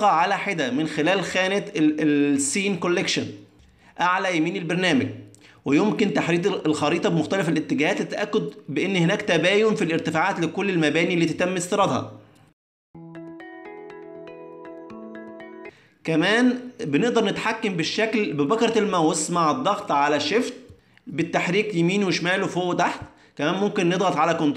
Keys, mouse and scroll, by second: 0.2 click, 0.9 click, 1.7 middle click, 3.0 click, 3.5 click, 4.1 click, 4.2 click, 4.6 click, 5.2 middle click, 6.9 middle click, 7.5 ctrl+middle click, 8.2 middle click, 9.4 shift+middle click, 10.5 middle click, 12.5 shift+middle click, 12.8 ctrl+middle click, 13.4 middle click, 14.8 ctrl+middle click, 15.3 middle click, 15.9 ctrl+middle click, 16.0 middle click, 16.4 shift+middle click, 17.3 click, 17.8 middle click, 19.5 shift+middle click, 19.8 ctrl+middle click, 20.6 click, 21.2 shift+middle click, 21.7 middle click, 23.1 ctrl+middle click, 24.4 middle click.